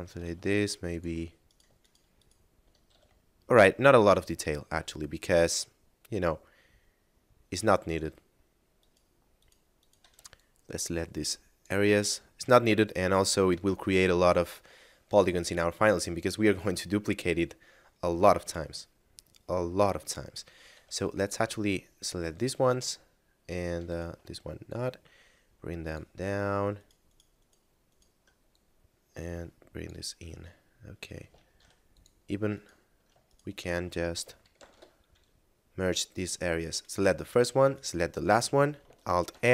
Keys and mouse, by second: 0.3 ctrl+Tab, 0.8 click, 1.4 right click, 1.8 shift+right click, 2.1 shift+right click, 2.9 a, 3.3 middle click, 7.6 right click, 8.8 shift+right click, 9.3 shift+right click, 9.7 shift+right click, 10.3 ctrl+click, 13.7 middle click, 18.8 middle click, 20.5 a, 21.3 ctrl+click, 23.8 shift+right click, 24.6 click, 26.6 shift+right click, 27.1 shift+right click, 27.3 shift+right click, 27.9 shift+right click, 28.4 click, 30.2 middle click, 31.5 ctrl+Tab, 31.8 click, 32.5 right click, 33.3 shift+right click, 34.5 alt+m, 36.1 click, 36.8 right click, 37.7 shift+right click, 39.3 alt+m.